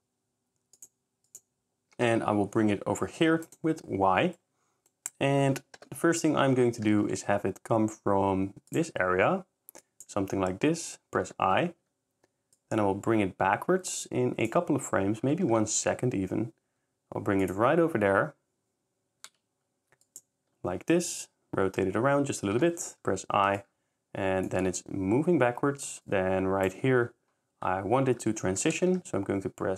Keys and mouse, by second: 0.9-1.9 drag, 1.9 g, 2.1 y, 6.9 g, 7.0 y, 9.1 r, 11.3 i, 12.6 click, 15.6 g, 15.8 y, 19.3 r, 22.6 i, 28.5 shift+r, 28.8 z, 28.9 z.